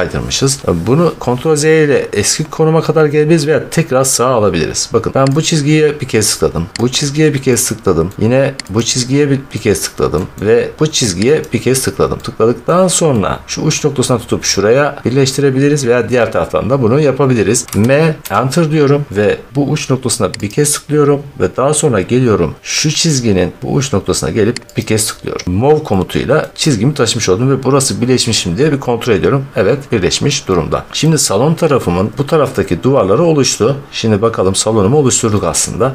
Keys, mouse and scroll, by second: 0.6 scroll, 5.4 click, 6.8 click, 8.0 middle click, 8.6 click, 10.1 middle click, 10.3 middle click, 11.3 click, 12.6 middle click, 13.5 middle click, 17.7 m, 19.5 Return, 20.4 click, 21.8 middle click, 22.0-22.3 scroll, 24.7 click, 25.5 scroll, 26.3 middle click, 27.0 middle click, 27.4 middle click, 27.5 middle click, 27.7 middle click, 28.1 middle click, 28.7 middle click, 28.7 middle click, 28.9 middle click, 29.3 scroll, 29.5 middle click, 29.9 middle click, 30.4 middle click, 30.7 middle click, 30.7 middle click, 30.8 middle click, 30.9 middle click, 30.9 middle click, 31.3 middle click, 33.3 middle click, 33.3 middle click, 33.6 middle click, 33.7 middle click, 33.9 middle click, 34.1 middle click, 34.3 middle click, 34.3-34.9 scroll, 35.7 middle click.